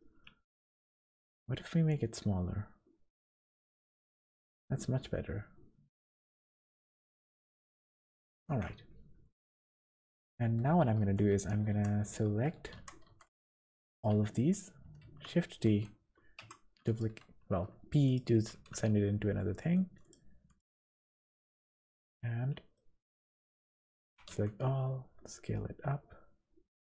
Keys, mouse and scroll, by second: 0.0 middle click, 0.6 s, 4.2 Tab, 4.5 middle click, 6.8 click, 7.2 middle click, 7.5 Tab, 8.5 KP_1, 9.2 scroll up 2, 10.0 alt+a, 11.1 b, 12.2 z, 12.8 3, 13.0 b, 15.2 shift+d, 16.4 p, 17.4 Tab, 18.0 click, 18.7 z, 19.3-19.9 scroll down 2, 19.6 middle click, 20.0 click, 20.5 click, 21.7 click, 22.7 middle click, 23.6 Tab, 24.0 a, 24.3 s.